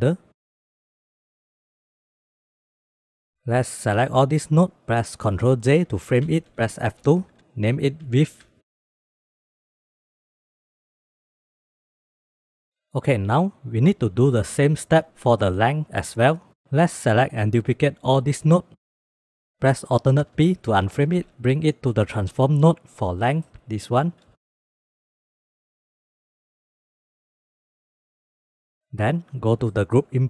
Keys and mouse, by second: 0.1 click, 0.4 click, 0.6 click, 0.7 click, 1.0 click, 1.3 ctrl+s, 2.3 drag, 2.6 click, 3.2 middle click, 3.4-4.8 drag, 5.7 ctrl+j, 6.9 F2, 9.0 click, 9.2 middle click, 9.6 click, 10.0 g, 10.3 click, 10.7 g, 10.8 click, 11.3 drag, 11.9 middle click, 12.2 middle drag, 12.3 middle click, 17.1 click, 17.9 shift+d, 18.7 drag, 19.0 g, 20.4 alt+p, 21.6 drag, 21.8 g, 22.5 click, 22.8 g, 23.4 click, 23.6-24.2 drag, 24.5 g, 25.3-25.6 drag, 25.6 g, 26.6 click, 27.0 click, 27.2 click, 27.5 g, 28.3 click, 29.0 click.